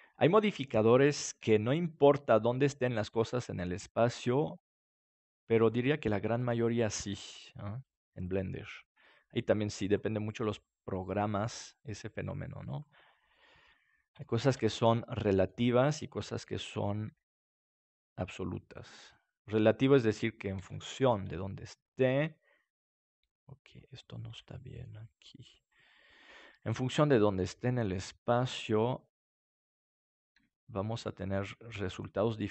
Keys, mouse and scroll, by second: 0.5 right click, 1.3 g, 2.4 click, 3.2 right click, 3.5 g, 5.6-7.5 drag, 6.4-7.4 right drag, 6.7 g, 7.5 right click, 8.6 g, 9.8 click, 11.1 g, 11.8 click, 12.7-14.5 drag, 13.0-15.2 middle drag, 15.3 middle click, 17.0 shift+d, 19.5-20.5 drag, 20.5 ctrl+s, 24.7-26.2 middle drag, 27.3 right click, 28.5 r, 30.1-31.3 drag, 30.3 g, 32.0-32.5 drag.